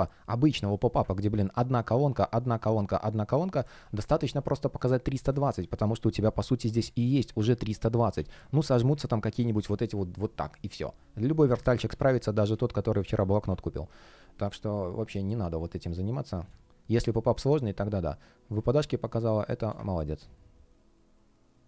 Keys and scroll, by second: 3.7 space, 5.2 space, 11.5 super+z, 14.0 space.